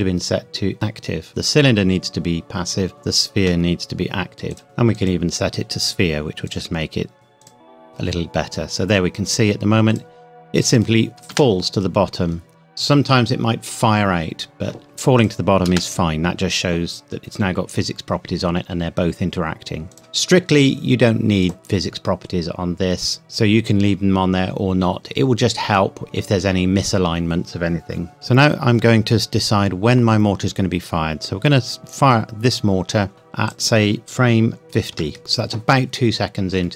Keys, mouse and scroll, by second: 4.5 click, 4.9 click, 9.9 click, 11.3 space, 14.8 click, 15.7 space, 19.9 click, 28.1 click, 30.2-32.0 scroll down 1, 33.5 click, 34.6 KP_0, 34.9 KP_Enter, 35.2 scroll down 1.